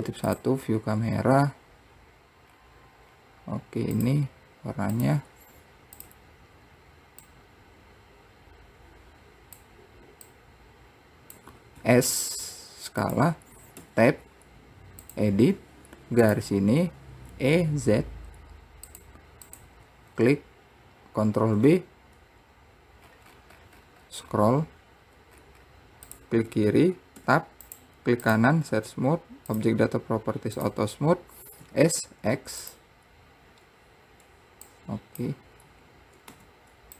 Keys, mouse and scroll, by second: 2.6 scroll up 2, 3.3-4.1 scroll down 2, 4.1 click, 5.1-6.2 drag, 13.9 Tab, 15.2 click, 16.4 click, 17.5 e, 19.7 click, 21.6 ctrl+b, 27.4 Tab, 27.8-29.7 right drag, 29.7 click, 30.7 click, 31.8 s, 33.6-34.9 scroll up 1, 34.9 click, 35.7 scroll up 3.